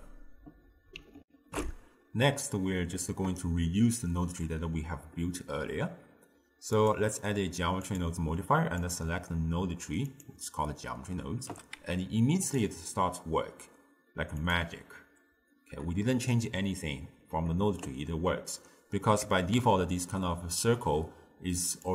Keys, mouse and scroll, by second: 1.3 ctrl+alt+shift+q, 6.8 click, 8.0-11.6 drag, 11.6 g, 14.4-17.5 drag, 19.3 Tab, 19.6 a.